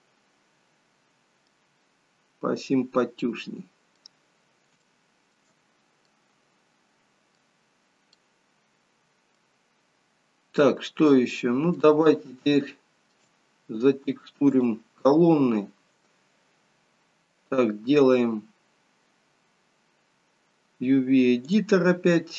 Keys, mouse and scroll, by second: 2.5-3.2 scroll down 2, 3.2 middle click, 4.2-4.8 scroll down 2, 4.9 shift+middle click, 6.1 middle click, 7.7-8.3 scroll up 2, 8.3 middle click, 11.1 middle click, 12.2 shift+middle click, 13.6-14.2 scroll up 3, 14.6 click.